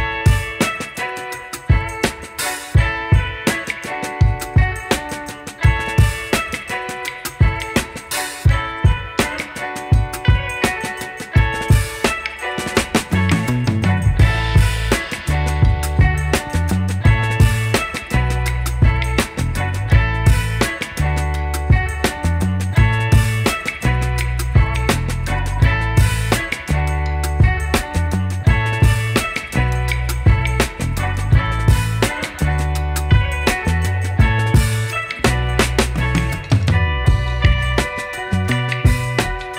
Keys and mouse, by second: 0.0-1.6 typing, 0.4 click, 1.6 click, 3.0-7.8 typing, 3.1 click, 3.4 ctrl+shift+z, 4.1 click, 4.3 click, 4.6 right click, 4.9 click, 5.6 click, 6.8 click, 7.0 click, 7.6 click, 8.2 click, 9.1 z, 9.2 click, 9.3 space, 9.3 click, 9.6 b, 9.8 click, 12.6-33.1 typing, 12.8 click, 13.9 click, 15.0 click, 15.3 click, 16.4 click, 17.5 click, 18.3 click, 18.9 click, 19.3 click, 19.6 click, 19.9 click, 20.3 click, 20.5 click, 20.9 click, 21.6 click, 22.0 click, 22.7 click, 23.8 click, 24.6 click, 25.9 click, 26.2 click, 26.4 click, 26.6 click, 27.9 click, 28.6 click, 29.6 click, 30.4 click, 31.1 click, 31.5 click, 31.8 click, 35.8 click, 37.6-39.0 typing, 37.8 click, 38.9 click.